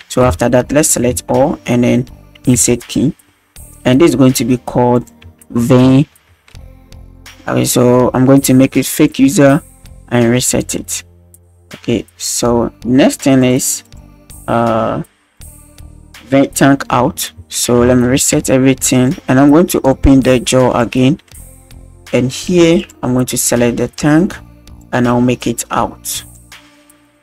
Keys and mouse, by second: 1.0 a, 2.6 i, 4.9-7.2 drag, 8.9 click, 10.6 click, 13.4 click, 13.8 click, 17.1 a, 17.6 alt+g, 17.8 alt+r, 18.1 alt+s, 18.9 click, 19.9 click, 21.3 middle drag, 22.8 middle drag, 23.1 click, 23.9 drag, 25.4 click, 27.0 click.